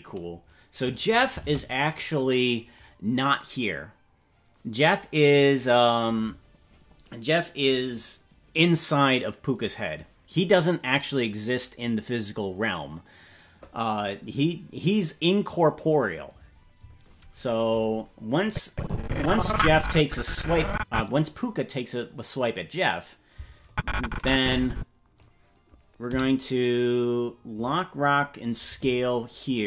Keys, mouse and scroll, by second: 0.9 right click, 1.4 ctrl+Tab, 1.9 right click, 2.8 right click, 18.4-21.0 drag, 23.6-25.2 drag, 26.0 i.